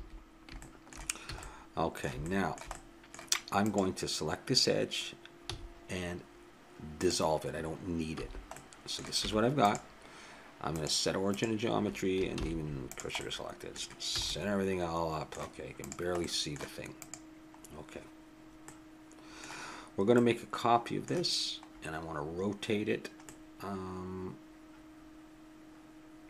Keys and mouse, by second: 1.3 a, 1.5 middle click, 2.3 middle click, 2.8 middle click, 3.6-5.5 drag, 5.5 x, 8.2 a, 8.7 middle click, 9.2 Tab, 10.7-12.5 drag, 12.4 shift+s, 13.2-14.5 middle drag, 14.1 a, 15.8-18.7 drag, 18.7 middle click, 20.2-23.9 middle drag, 24.2 middle click.